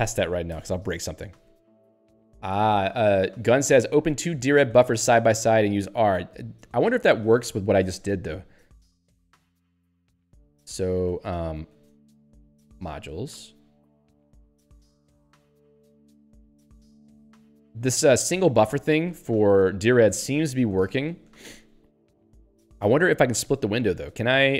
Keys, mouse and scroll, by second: 0.5 Escape, 1.5 ctrl+g, 9.2-10.1 typing, 11.0 ctrl+g, 12.5-13.5 typing, 15.6 ctrl+g, 18.0 ^, 20.6-21.5 typing.